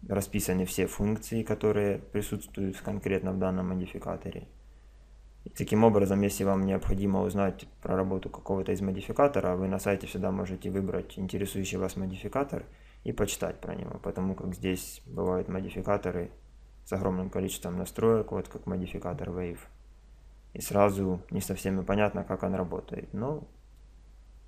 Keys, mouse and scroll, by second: 6.5-8.3 drag, 14.1-15.7 drag, 15.8 middle click, 15.9-18.3 middle drag, 22.5-24.4 middle drag.